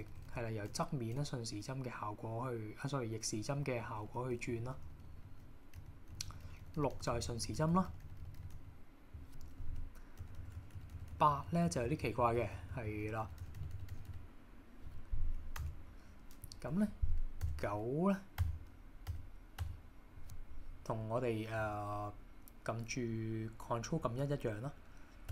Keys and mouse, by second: 0.0-1.2 typing, 3.4-8.6 typing, 9.7-14.1 typing, 15.7 KP_1, 17.5 KP_9, 18.4 KP_9, 19.1 KP_9, 19.7 KP_9.